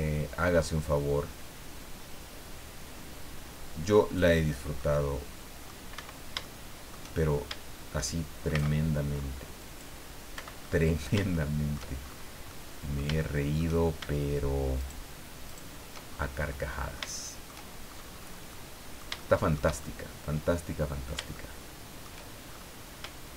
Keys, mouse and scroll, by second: 4.8-5.8 middle drag, 5.9 Escape, 6.4 shift+middle click, 8.5 c, 9.1-9.4 scroll up 2, 9.6 click, 10.3 Escape, 10.6-11.9 middle drag, 12.0-12.5 shift+scroll up 3, 12.5 middle click, 14.8 shift+right click, 15.4 shift+right click, 16.0-16.3 shift+scroll down 2, 16.5 middle click, 17.9-18.4 shift+scroll up 3, 18.5-19.7 middle drag, 19.8-22.2 shift+middle drag, 22.5-22.9 shift+scroll up 1.